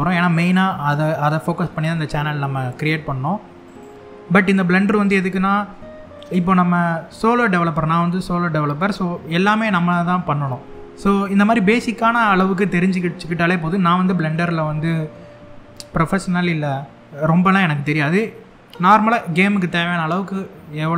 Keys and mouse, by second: 3.8 middle click, 5.7 click, 7.1-7.8 shift+middle drag, 8.3 click, 13.4 click.